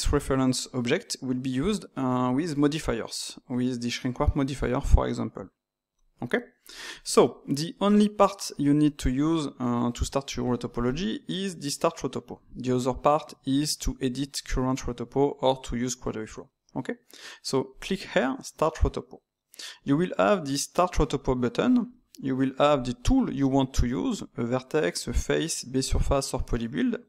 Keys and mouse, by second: 17.6 click, 22.7-25.8 drag.